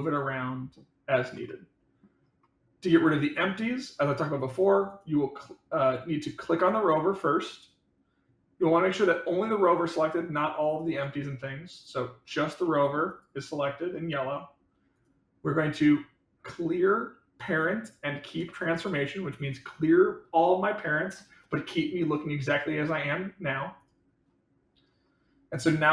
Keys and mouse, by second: 1.4 middle click, 2.8 click, 4.3 click, 8.6 middle drag, 10.8 click, 11.8 click, 12.6-12.9 middle drag, 13.5-13.9 middle drag.